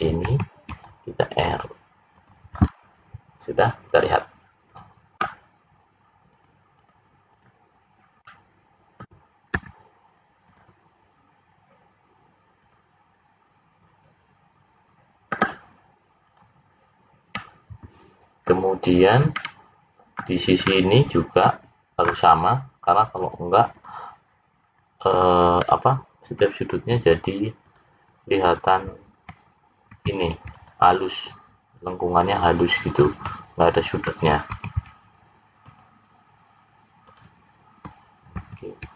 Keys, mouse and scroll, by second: 0.2 ctrl+r, 2.6-3.2 scroll down 2, 3.2 scroll down 2, 4.0 click, 4.7 click, 6.6 click, 7.6 click, 8.3 middle click, 12.6 click, 16.2 click, 17.4 middle click, 19.3 middle click, 20.6 middle click, 23.0 click, 24.6 scroll up 3, 25.6 middle click, 27.7 click, 30.0 ctrl+r, 34.6 ctrl+r, 38.4 ctrl+r.